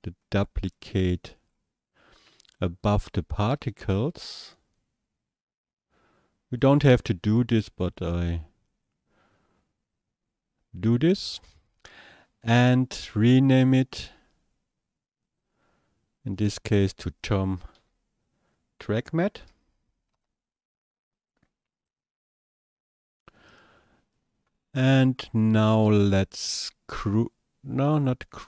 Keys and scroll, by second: 17.8 space.